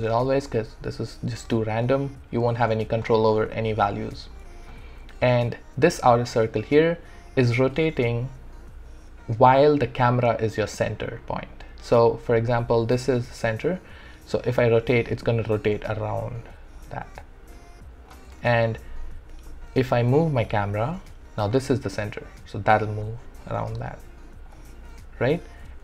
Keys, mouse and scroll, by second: 4.5 ctrl+z, 14.5 ctrl+z, 14.5-18.4 drag, 18.4 ctrl+z, 19.5-24.7 alt+drag, 24.7 ctrl+z, 25.4 ctrl+z.